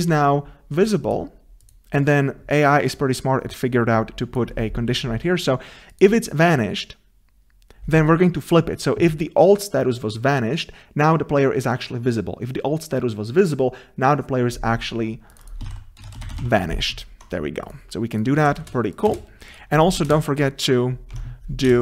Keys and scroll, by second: 21.2 Tab.